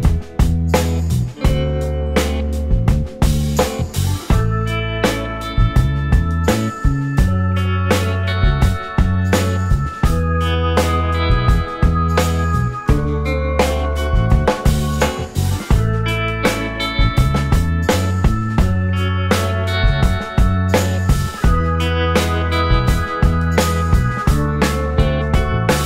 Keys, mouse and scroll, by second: 2.3 shift+click, 4.0 shift+click, 7.2 shift+click, 7.4 right click, 10.3 scroll down 1, 10.6 alt+click, 11.2 alt+middle click, 12.4 right click, 19.1 shift+click, 19.8 g, 21.2 right click, 23.5 alt+middle click, 24.6 shift+click.